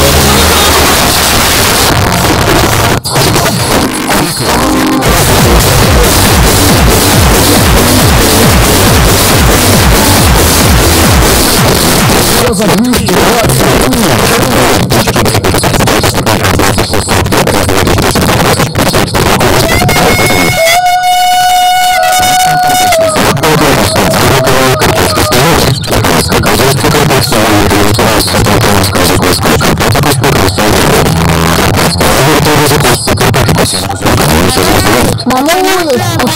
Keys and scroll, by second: 1.0 Page_Down, 11.4 Page_Down.